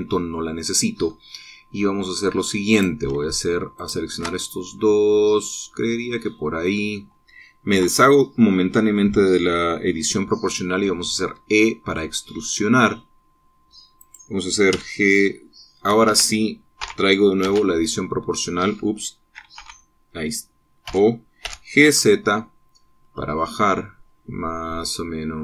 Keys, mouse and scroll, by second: 0.9 click, 3.3 click, 4.4 shift+click, 5.0-6.0 shift+middle drag, 6.0-7.8 drag, 8.3 o, 11.9 e, 14.6 click, 15.4 g, 16.7 Escape, 17.4 o, 18.0 z, 19.2 Escape, 20.2 o, 21.5 o, 22.1 g, 22.5 z, 23.6-24.0 scroll up 2.